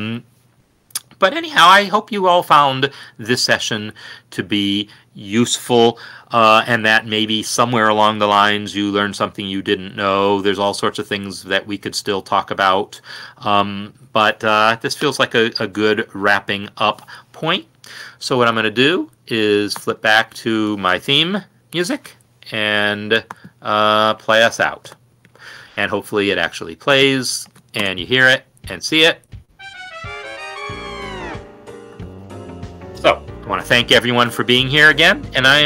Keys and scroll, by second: 22.3 ctrl+F10, 24.5 shift+Left, 25.2 5, 25.4 Return, 27.7 ctrl+Home, 28.1 space.